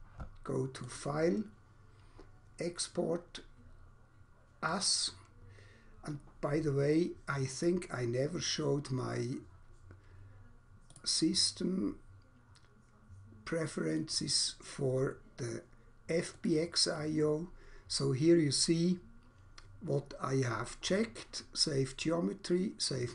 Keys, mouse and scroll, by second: 0.9 click, 4.5 click, 7.5 click, 10.9 click, 14.1 click, 16.4 click.